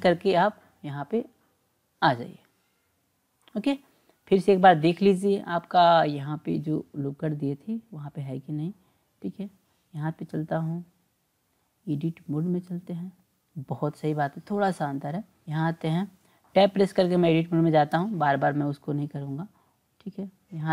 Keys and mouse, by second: 5.0-8.3 drag, 9.2 click, 10.6-12.6 drag, 18.0 Tab, 20.2-20.7 drag.